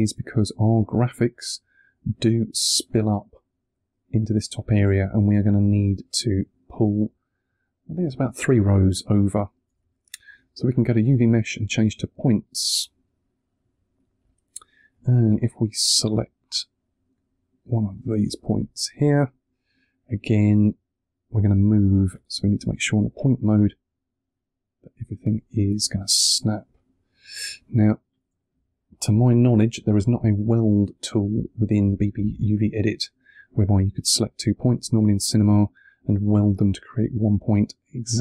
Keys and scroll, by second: 8.7 2, 25.8 2.